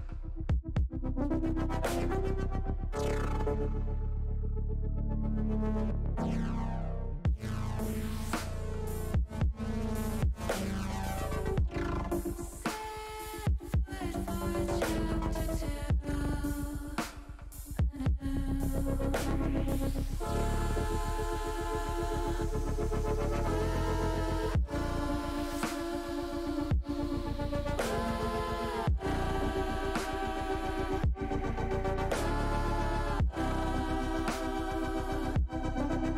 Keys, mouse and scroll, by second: 0.1 Tab, 2.0 ctrl+z, 4.3 Tab, 5.0 Tab, 5.9 Tab, 7.7 alt+h, 8.7 ctrl+z, 9.2 ctrl+z, 9.5 ctrl+z, 9.8 ctrl+z, 10.1 ctrl+z, 11.2 alt+h, 14.3 l, 15.0-16.2 drag, 17.2 click, 18.4 Tab, 19.3 click, 22.6 shift+middle click, 23.6 click, 24.1 shift+middle click, 25.0 click, 26.1 Tab, 27.5 shift+middle click, 28.5 middle click, 29.3 middle click, 30.9 shift+middle click, 33.0 ctrl+z, 34.3 ctrl+z, 34.6 ctrl+z, 34.9 ctrl+z, 35.1 ctrl+z, 35.4 ctrl+z, 35.6 ctrl+z, 35.9 ctrl+z.